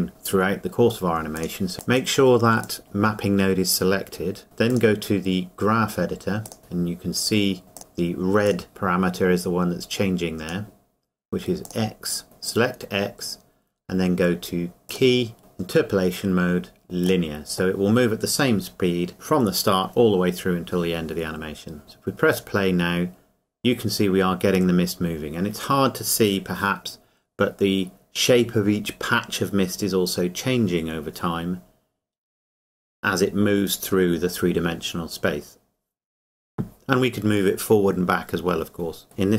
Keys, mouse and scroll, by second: 1.4 click, 4.7 click, 7.8 click, 14.9 click, 17.0 click, 22.3 click.